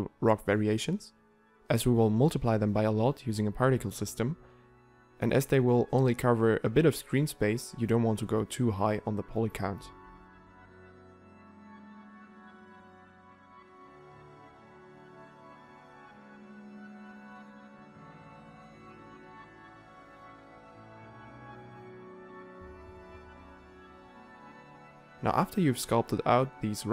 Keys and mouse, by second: 0.4 f, 2.8 ctrl+z, 3.1 f, 15.6 s, 15.8 ctrl+a, 16.2 shift+d, 17.4 f, 17.6 ctrl+z, 20.7 middle click, 22.2 middle click, 23.7 middle click, 25.0 middle click, 25.3 shift+d, 25.7 s, 26.0 r, 26.4 ctrl+a, 26.6 ctrl+a.